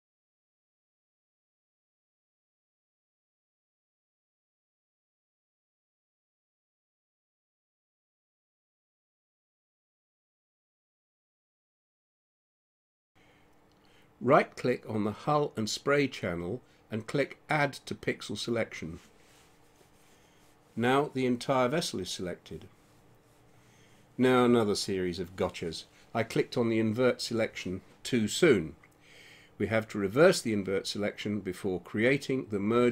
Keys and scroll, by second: 5.6-7.9 typing, 8.1 Return, 23.2 ctrl+0.